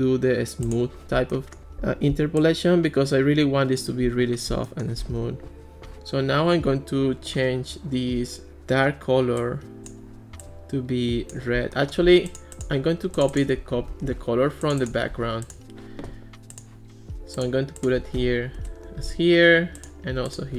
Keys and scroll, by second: 13.9 Escape, 15.1 super+c, 18.2 super+v, 18.6 Return.